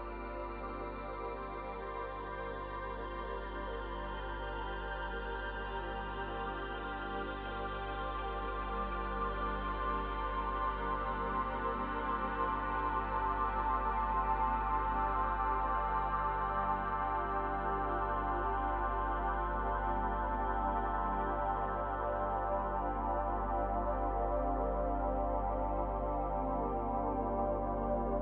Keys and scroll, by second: 26.3 space.